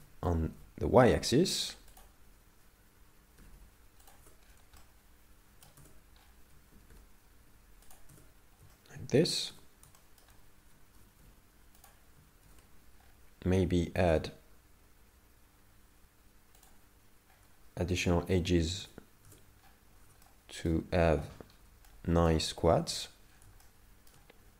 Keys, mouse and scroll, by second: 4.5 scroll down 5, 4.8 shift+middle click, 5.8 Tab, 6.2 scroll up 4, 6.7 g, 8.1 Tab, 8.7 shift+middle click, 9.5 Tab, 10.0 shift+middle click, 11.0 g, 12.5 ctrl+r, 18.0 right click, 18.8 Tab, 18.8 right click, 19.7-20.3 scroll up 6, 20.3 shift+middle click, 21.4-22.1 scroll down 4, 21.9 shift+middle click, 22.9 Tab, 23.3-23.7 scroll down 4, 23.7 shift+middle click.